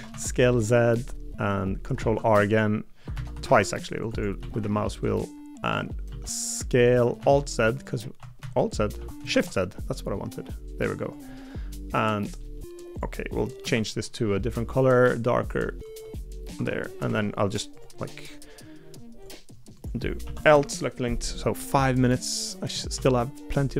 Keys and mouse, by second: 2.0 ctrl+r, 3.1 ctrl+z, 3.5 ctrl+r, 4.4 s, 6.1 s, 11.3 middle click, 12.0 middle click, 14.5 g, 16.5 Tab, 16.8 middle click, 17.0 Tab, 20.2 l, 20.5 KP_7, 22.9 shift+d.